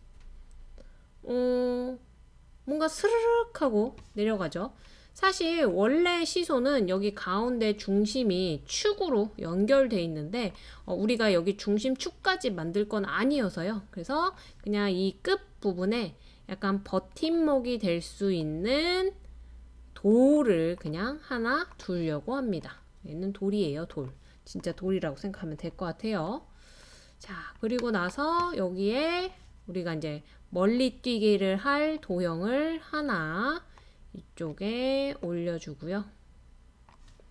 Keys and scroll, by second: 0.0-0.4 typing.